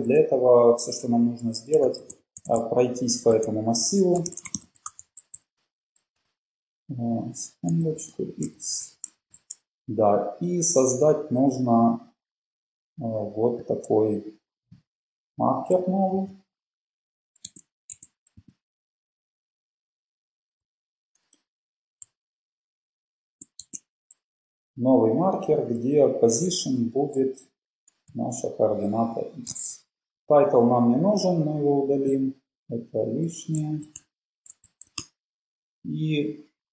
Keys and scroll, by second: 0.1 super+Right, 1.2 Return, 1.7-5.6 typing, 6.0 Left, 7.3-8.9 typing, 10.3 Down, 10.3 typing, 14.3 shift+Up, 15.5 shift+super+Left, 16.3 super+c, 17.3 Up, 18.1 Tab, 18.5 super+v, 19.2 Up, 20.6 Delete, 21.3 Delete, 21.6 Down, 22.3 shift+Down, 22.6 shift+Down, 23.4 shift+Right, 24.4 Up, 25.6 super+Right, 26.2 BackSpace, 26.4 Delete, 26.5 BackSpace, 27.3 BackSpace, 28.1 BackSpace, 29.0 Down, 29.5 Home, 32.8 Page_Up, 33.5 super+Left, 33.9 shift+super+Right, 35.3 BackSpace.